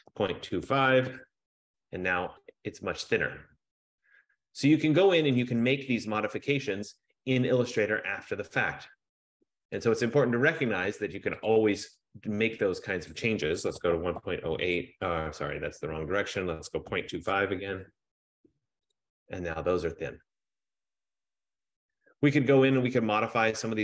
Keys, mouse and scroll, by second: 0.0-1.2 typing, 2.6 click, 4.9-6.7 scroll, 9.8 click, 11.6 click, 13.2 click, 13.6-17.8 typing, 19.0 click, 19.8 scroll, 20.4-21.4 scroll.